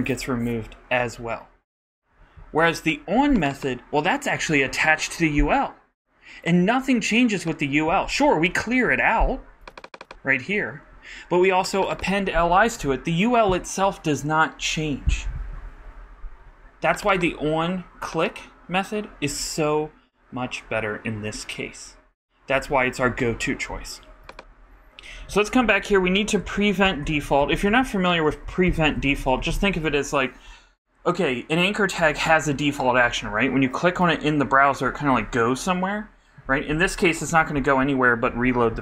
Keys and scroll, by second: 28.0-30.2 typing.